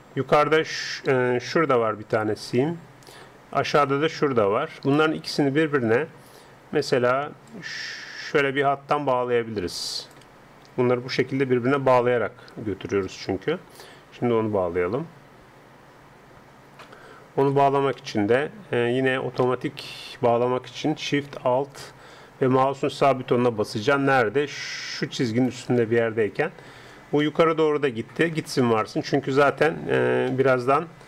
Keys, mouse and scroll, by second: 1.7-3.8 d, 2.2-5.7 drag, 3.9-10.3 d, 7.5-9.3 drag, 12.5 d, 13.0 d, 13.1-16.3 right drag, 13.1 d, 17.5 d, 17.5 d, 18.0 middle click, 25.2-26.9 right drag, 26.9-31.0 middle drag.